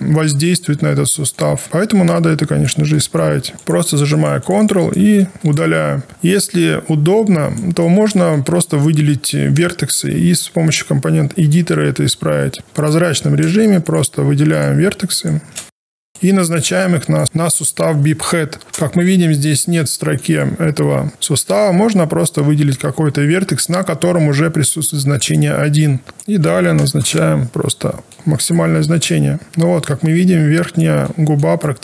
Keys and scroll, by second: 12.1 w, 12.5 1, 28.8 alt+1.